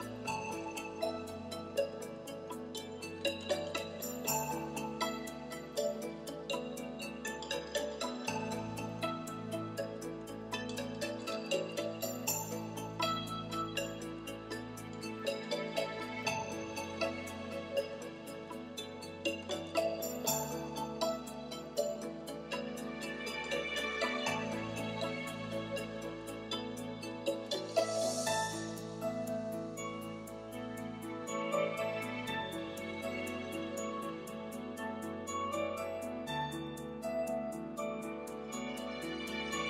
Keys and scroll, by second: 14.7 ., 15.2 0, 20.9 Right, 21.3 BackSpace, 21.9 l.